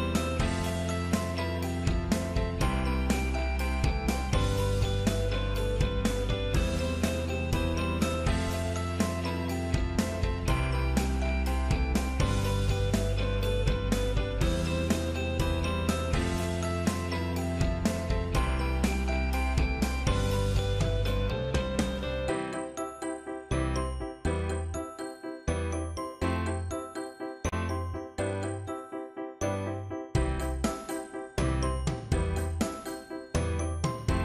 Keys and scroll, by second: 1.1 ctrl+z, 28.9 ctrl+z.